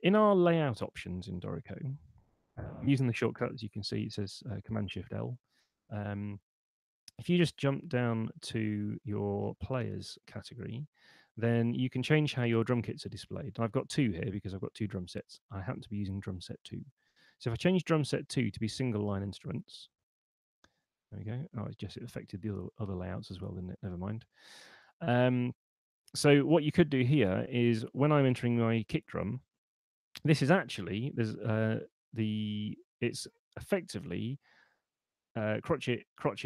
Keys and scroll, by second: 1.0 Return, 1.6 shift+super+l.